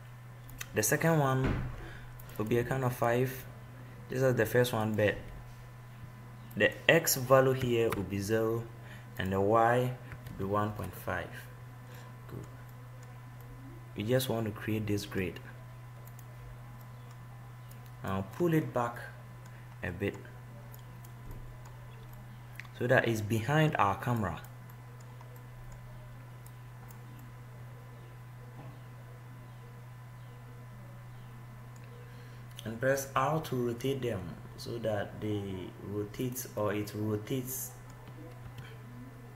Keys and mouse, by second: 0.7-7.1 drag, 7.1-9.4 middle drag, 12.6-15.1 middle drag, 17.1 middle click, 19.7 middle click, 21.1-22.7 drag, 22.7-24.3 middle drag, 24.8 click, 33.4 r, 37.0-38.9 middle drag, 38.9 r.